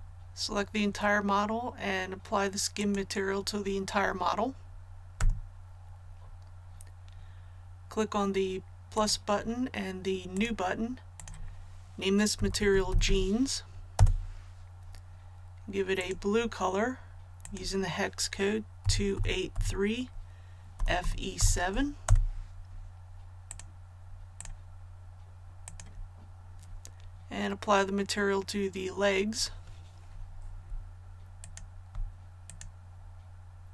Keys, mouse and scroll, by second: 2.7 click, 5.1 a, 8.9 click, 12.3-13.0 typing, 13.9 Return, 15.9 click, 18.8 KP_2, 19.1 KP_8, 19.4 KP_3, 20.7-21.3 typing, 23.4 click, 31.4 alt+right click, 32.4-33.7 alt+shift+right drag.